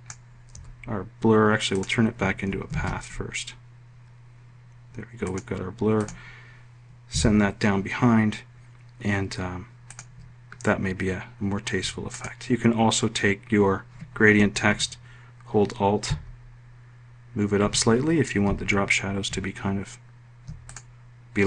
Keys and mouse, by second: 0.5 1, 1.7 click, 2.7 ctrl+shift+c, 5.2 click, 6.0 click, 7.1 Page_Down, 16.0 alt+Up, 17.6 alt+Up.